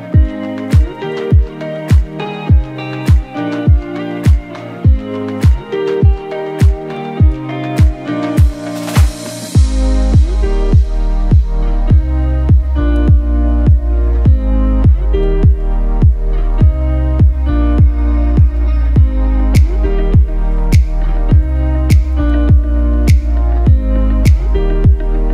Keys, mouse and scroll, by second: 5.1 scroll down 1, 5.4 scroll up 1, 5.5 z, 5.7 click, 6.1 z, 6.3 click, 14.3 scroll down 1, 14.4-17.3 typing, 15.1 click, 15.4 click, 15.7 click, 16.4 click, 17.1 click, 17.3 click, 20.3 ctrl+c, 20.8 ctrl+b, 21.9 click, 22.4-23.4 drag, 23.4 ctrl+z, 24.2 shift+Up, 25.0 shift+Left.